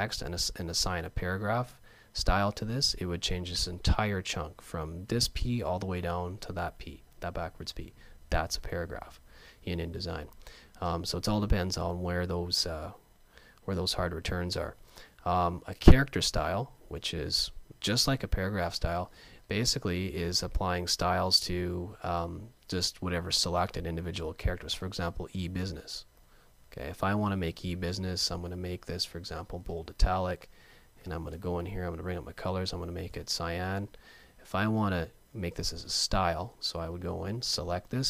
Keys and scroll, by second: 12.1 super+z, 31.1 F5.